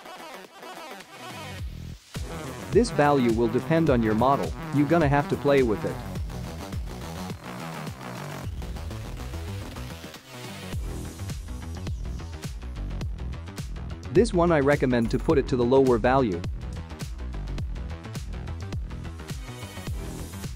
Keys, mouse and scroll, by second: 3.2 click, 7.9 click, 9.2 KP_0, 14.8 click.